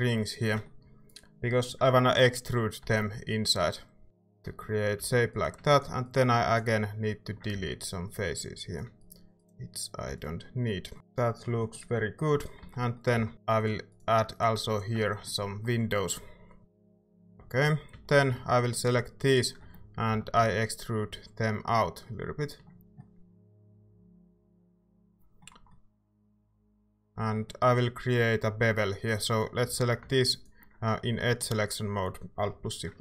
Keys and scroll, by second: 2.8 e, 5.0 a, 7.6 x, 10.1 x, 12.6 Tab, 13.1 Tab, 13.3 a, 15.1 typing, 16.6 Tab, 17.4 Tab, 17.9 a, 20.1 e, 29.6 a.